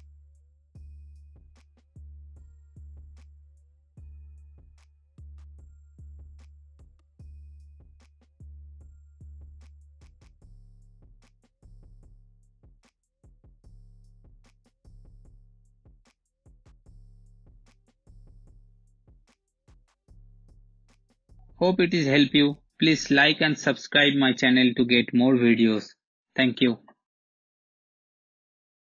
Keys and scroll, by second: 7.0 space, 26.7 space.